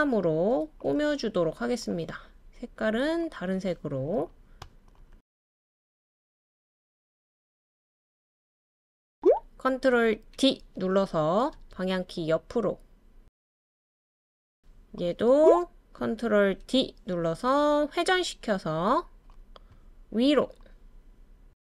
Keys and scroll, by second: 10.0 super+d, 10.8 Right, 10.9-11.3 Right, 13.7 Left, 15.4 ctrl+d, 16.0 super+d, 20.4 Right, 20.7 Right, 20.8 Right, 20.9 Right, 21.0 Right.